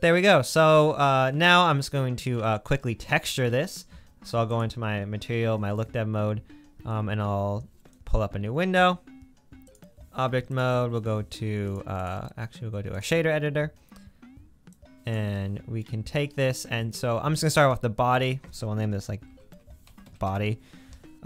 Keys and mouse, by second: 0.0-5.4 middle drag, 8.1 click.